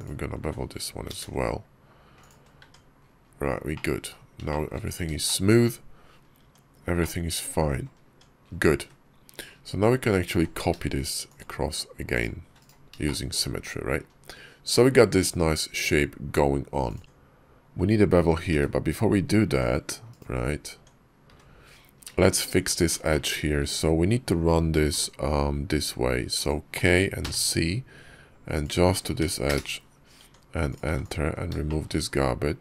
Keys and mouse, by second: 1.0 ctrl+b, 2.5 Tab, 3.6 click, 3.6 middle click, 4.3 shift+click, 5.1 shift+click, 6.3 Tab, 6.9 click, 7.9 Tab, 8.6 `, 10.2 alt+x, 12.9 shift+click, 15.0 click, 16.8 click, 17.0 Tab, 19.9 click, 20.6 Tab, 21.1 `, 22.0 shift+middle click, 22.4 Tab, 22.9 shift+middle click, 24.8 k, 30.0 Tab, 30.5 click, 30.7 x, 31.5 shift+click.